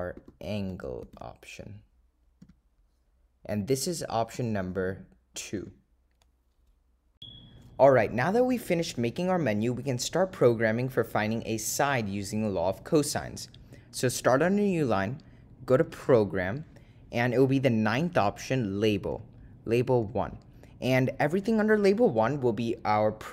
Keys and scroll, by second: 0.7 ), 4.5 ,, 5.7 2, 14.4 Return, 19.9-20.6 typing, 21.0 Return.